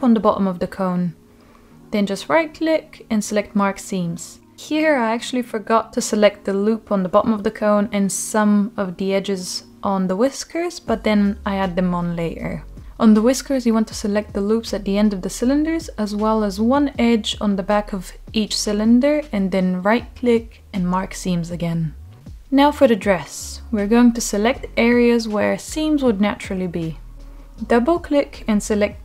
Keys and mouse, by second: 0.5-1.9 right drag, 2.3-3.7 middle drag, 5.0 click, 5.8 Tab, 7.2 click, 7.8 ctrl+z, 8.6 middle click, 9.8-12.2 middle drag, 12.5 shift+click, 13.1 Tab, 13.7 click, 14.8 shift+drag, 15.1 middle click, 15.9-16.5 shift+drag, 16.7 shift+middle click, 17.3-17.6 shift+drag, 17.9 shift+click, 18.1 middle click, 19.6 shift+click, 20.5 right click, 21.3 middle click, 22.3 middle click, 22.6 Tab, 23.6 middle click, 25.0 click, 25.8 middle click, 28.0 shift+click.